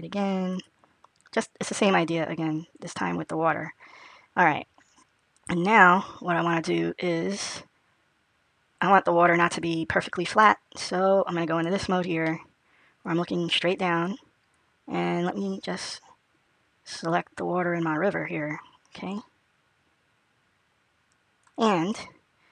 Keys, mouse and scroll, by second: 6.4 middle click, 7.8-8.7 scroll down 1, 12.1 middle click, 14.4 click.